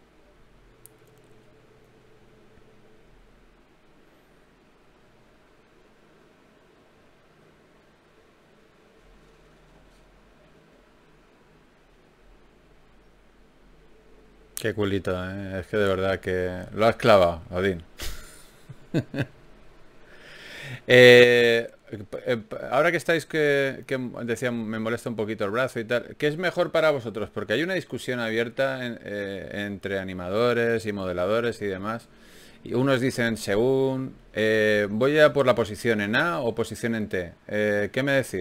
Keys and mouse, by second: 1.9 right click, 2.7 middle click, 3.3 right click, 5.7 d, 5.9-8.6 drag, 13.9 Escape, 14.5 shift+q, 18.6-21.4 drag, 19.4 g, 21.0 shift+Tab, 26.4-28.4 right drag, 27.4 g, 30.0 right click, 30.6 shift+q, 35.7-37.5 drag, 37.1 g, 38.1-38.4 drag, 38.3 g.